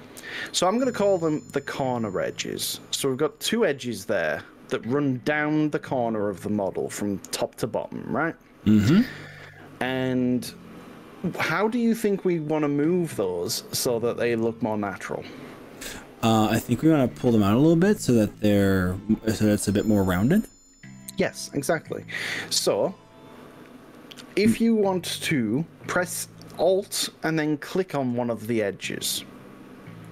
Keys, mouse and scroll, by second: 9.3-16.9 middle drag, 21.5-27.5 middle drag.